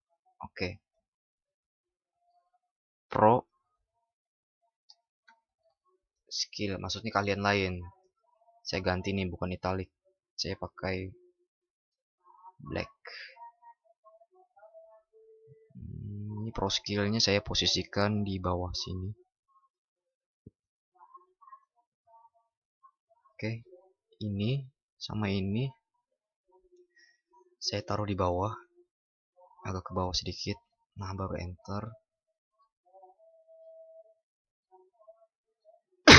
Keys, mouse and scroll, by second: 7.9 ctrl+shift+@.